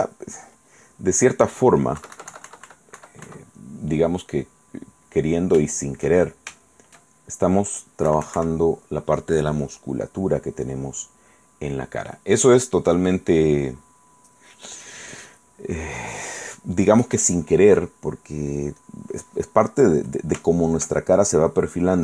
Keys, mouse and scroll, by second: 2.2 KP_Subtract, 4.1-5.3 drag, 5.5 shift+click, 6.4 shift+click, 7.4 shift+click, 8.3 KP_Subtract, 10.0-12.4 drag, 15.6-17.3 drag, 18.0 click, 19.0 click, 20.6-21.7 shift+middle drag.